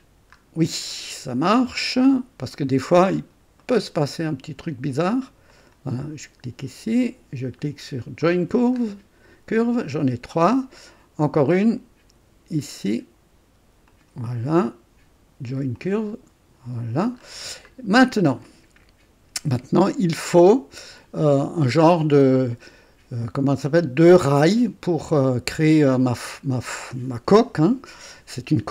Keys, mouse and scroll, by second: 0.1 scroll down 2, 0.9 right click, 1.8 right click, 2.6 right click, 3.2-3.5 scroll up 2, 3.6 right click, 5.5 click, 8.2 click, 9.0-9.4 scroll down 1, 10.3 right click, 11.5 right click, 13.9 click, 15.7 click, 16.4-17.8 scroll down 2, 18.5 right click.